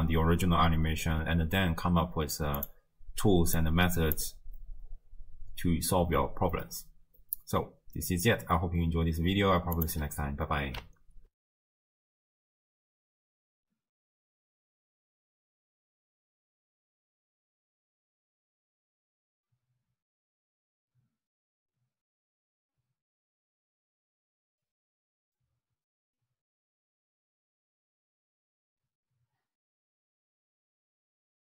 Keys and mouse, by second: 2.6 click, 3.6 click, 9.8 click, 11.4 ctrl+alt+shift+w.